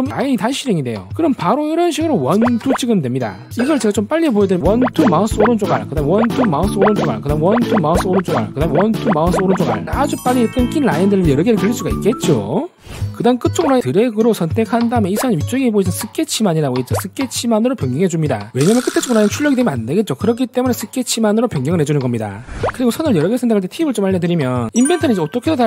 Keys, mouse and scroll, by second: 0.0 r, 2.4 click, 3.1 click, 4.6 click, 4.9 click, 5.2 click, 5.6 right click, 6.0 r, 6.3 click, 6.7 click, 7.0 right click, 7.3 r, 7.7 click, 8.0 click, 8.3 right click, 8.7 r, 8.9 click, 9.3 click, 9.6 right click, 13.8 click, 15.1 shift+click, 18.5 click.